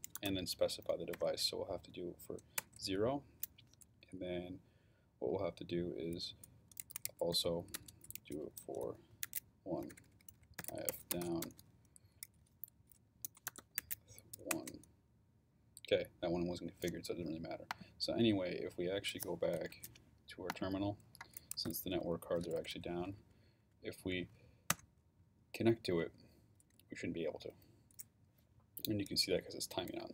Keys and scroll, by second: 0.0-1.1 typing, 2.6 Return, 6.6-11.7 typing, 13.0-14.3 typing, 14.5 Return, 21.3-22.6 typing, 23.2 Up.